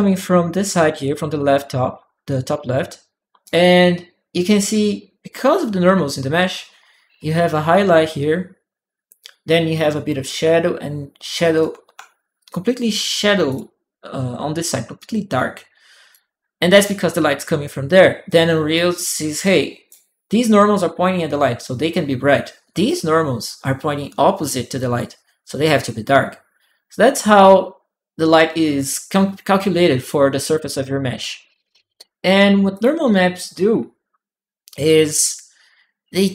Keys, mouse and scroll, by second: 2.1-3.2 drag, 2.7 right click, 11.4-13.3 drag, 11.7 d, 12.3 right click, 14.8-15.9 drag, 15.1 right click, 18.1-19.7 drag, 18.1 right click, 19.2 right click, 32.5 click, 34.6-35.9 drag.